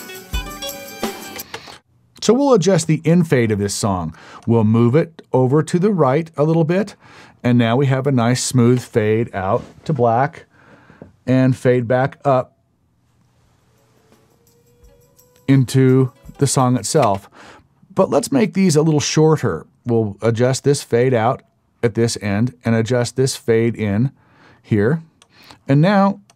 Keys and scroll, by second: 1.4 space, 8.8 space, 17.0 space.